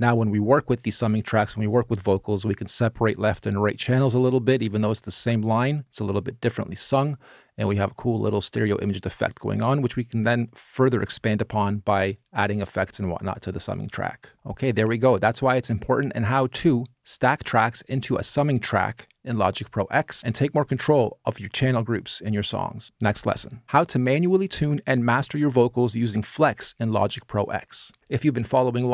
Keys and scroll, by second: 14.3 space.